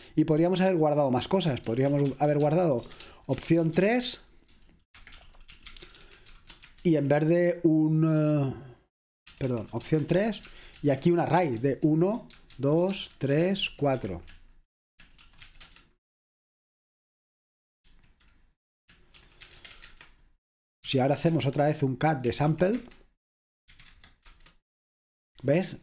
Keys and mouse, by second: 0.0-16.1 typing, 17.9 F5, 19.0-24.3 typing.